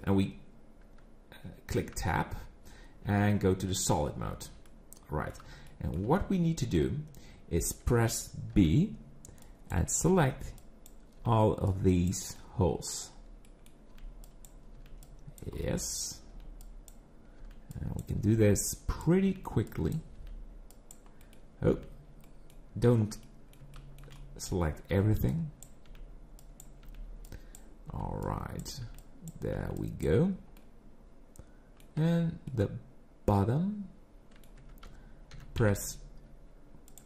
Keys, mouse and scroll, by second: 2.0 Tab, 3.0 z, 4.7 middle click, 5.7 shift+middle click, 6.2-7.7 scroll up 1, 7.7-8.5 scroll up 1, 8.5 b, 10.1 b, 12.4 middle click, 13.1-13.6 scroll down 2, 13.4 middle click, 13.9 b, 14.7 b, 15.6 middle click, 16.3 b, 17.4 b, 19.2 b, 20.2 b, 21.2 middle click, 21.7 b, 23.2 middle click, 23.7 shift+middle click, 24.2 middle click, 24.6 scroll up 2, 24.9 b, 25.9 b, 27.9 b, 28.8 b, 30.6 middle click, 32.5 middle click, 34.6 Tab, 35.3 g.